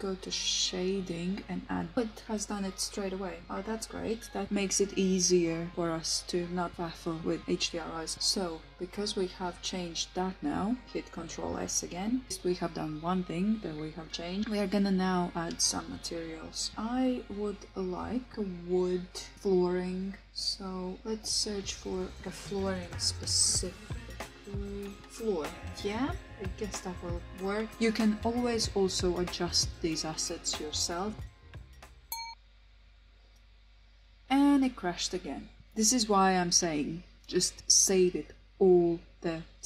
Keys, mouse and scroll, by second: 0.1 click, 0.1 typing, 2.3 click, 5.1 shift+middle click, 6.6 shift+middle click, 8.6 shift+middle click, 28.6 click, 28.8 typing.